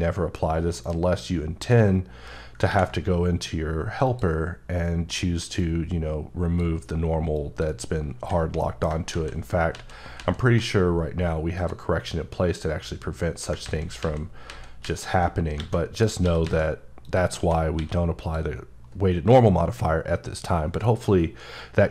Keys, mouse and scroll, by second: 0.2 scroll up 1, 0.5 shift+middle click, 0.8-2.4 scroll up 1, 2.4 ctrl+scroll up 1, 3.8 click, 5.4 click, 8.4 middle click, 8.9 ctrl+z, 9.5 ctrl+z, 11.4 click, 13.4 ctrl+z, 13.8 ctrl+z, 14.2 ctrl+z, 15.2 scroll down 1, 15.4 a, 15.7 click, 16.0 s, 16.2 z, 16.8 click, 17.5 s, 18.0 click.